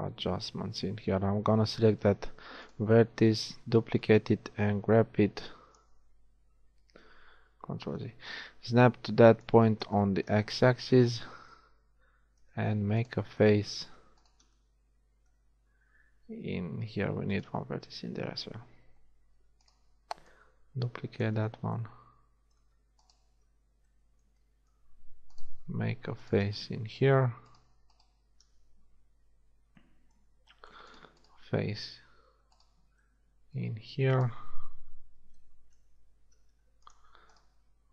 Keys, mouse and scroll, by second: 1.9 shift+d, 4.0-5.8 drag, 7.3 ctrl+z, 7.5 ctrl+z, 8.3-9.4 drag, 11.1 z, 13.1-15.2 drag, 15.2-19.4 right drag, 19.4 shift+d, 20.3 click, 29.2 f, 29.5 a, 35.3 f, 36.1 ctrl+Tab.